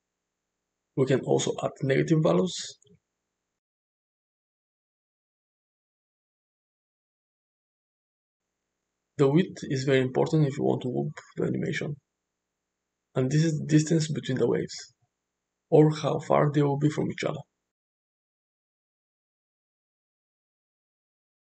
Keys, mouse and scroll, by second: 12.8-21.4 drag.